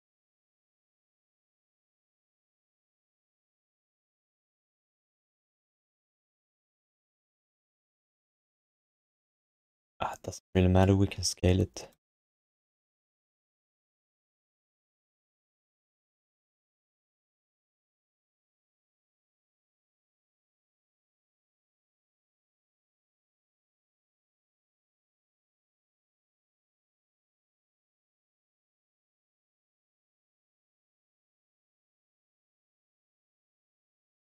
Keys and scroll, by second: 6.6 r, 29.1 q, 31.6 e.